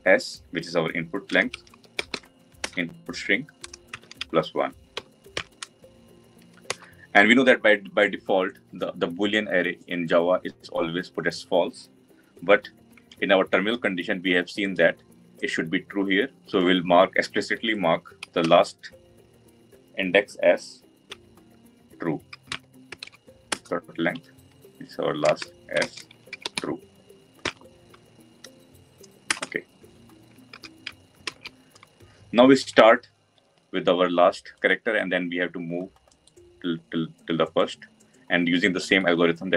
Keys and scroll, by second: 2.6 Return, 23.4 Return, 30.4 ctrl+s, 32.1 ctrl+alt+l.